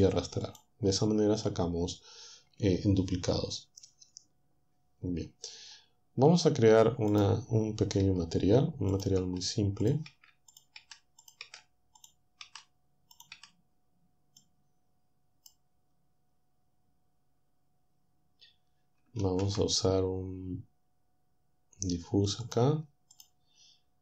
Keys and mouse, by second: 0.5 click, 7.2 click, 8.1 Delete, 9.2 Delete, 10.1 Delete, 10.8 Delete, 11.5 Delete, 12.4 Delete, 13.4 Delete, 19.2 shift+a, 22.5 click, 23.1 click.